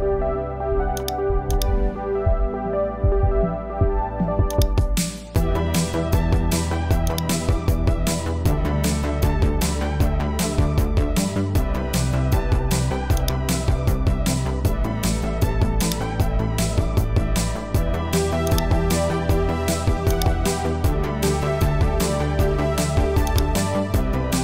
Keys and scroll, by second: 10.6 Return.